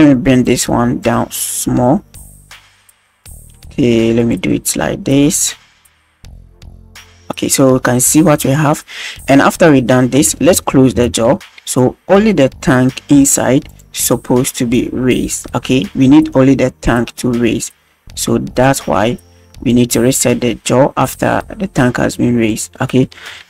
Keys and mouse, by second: 0.4 click, 1.3-1.7 middle drag, 1.9-2.8 middle drag, 3.2 middle click, 4.2 shift+middle drag, 4.5 middle drag, 6.5-7.2 middle drag, 7.2-7.7 drag, 8.4 drag, 9.0-10.2 middle drag, 11.3 alt+g, 14.0-14.4 middle drag, 16.1 click, 16.3-17.1 middle drag, 17.3 middle click, 18.6 right click, 19.6 click, 23.2 KP_1.